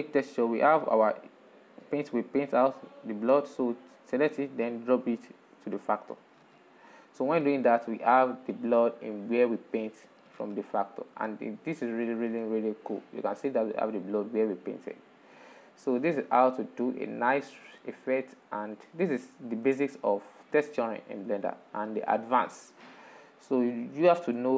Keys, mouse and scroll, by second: 0.8-3.7 drag, 4.7 click, 8.0-9.1 middle drag, 9.1-9.6 scroll up 5, 10.3 middle click, 10.3-10.8 scroll down 2, 11.3-15.7 middle drag, 15.7 scroll down 2, 16.2-16.9 middle drag, 17.6-20.0 middle drag, 20.0-20.3 scroll up 4, 20.8-22.0 middle drag, 22.0-22.4 scroll down 1, 22.4-24.3 middle drag, 24.3-24.5 alt+shift+scroll down 4.